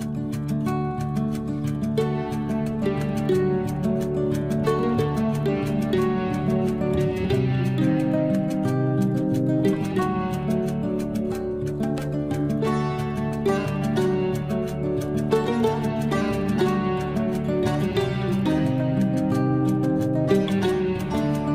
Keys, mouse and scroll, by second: 0.0 l, 0.2-1.4 scroll up 1, 1.4 click, 2.7 Escape, 3.4 scroll up 1, 4.1 click, 4.5 scroll down 1, 5.7 click, 5.9 space, 6.3 scroll down 1, 8.8 l, 9.2 scroll up 1, 10.3 click, 12.9 space, 13.1-14.0 scroll up 1, 14.0 scroll down 1, 14.4-16.8 drag, 16.8 Delete, 17.9 l, 18.3 scroll up 1, 19.2 click, 19.9-20.9 scroll up 1, 20.9 click, 21.2 space.